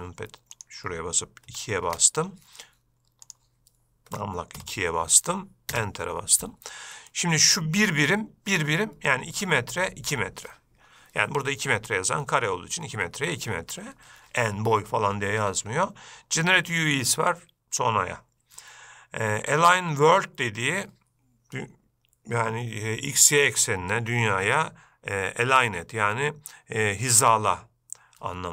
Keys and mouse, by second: 0.7-2.6 drag, 3.4-6.7 drag, 7.3 middle click.